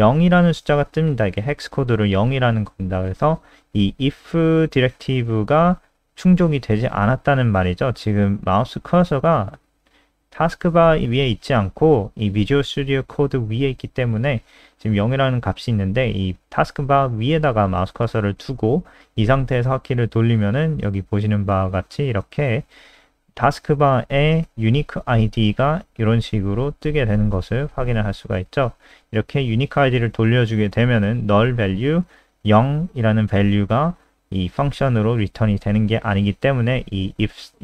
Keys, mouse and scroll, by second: 4.3 click, 20.4-21.4 scroll up 1, 22.7 alt+click, 28.1-29.3 scroll up 1, 29.3-30.3 scroll up 1, 33.9 click, 36.2-37.2 scroll down 1.